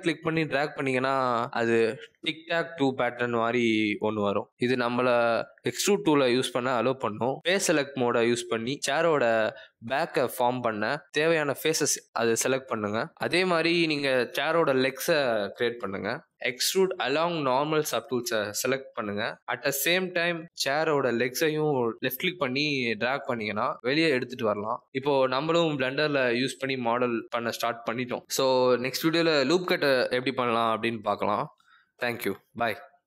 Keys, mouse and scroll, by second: 1.1 click, 3.2 click, 4.4-5.8 scroll up 6, 5.8 click, 6.5 middle click, 8.7 click, 9.2 shift+click, 9.6 click, 10.0 middle click, 11.0 shift+click, 11.6 shift+click, 12.1 shift+click, 12.7 shift+click, 13.2 middle click, 15.2 click, 18.3-18.8 scroll down 2, 18.8 click, 21.4 middle click, 22.4 g, 24.1 scroll down 2, 24.4 shift+scroll up 1, 24.4 shift+middle click, 24.9 middle click.